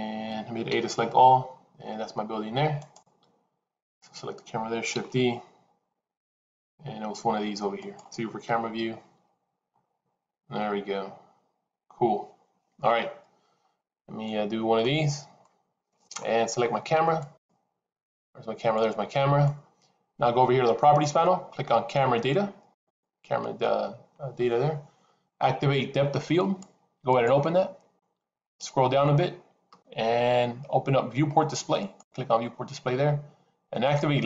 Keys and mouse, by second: 0.7 a, 2.7 click, 5.3 shift+d, 8.3 KP_0, 14.2 middle click, 15.3 middle click, 17.0 click, 18.7-19.3 middle drag, 26.3 click, 27.0-27.8 drag, 31.7 click.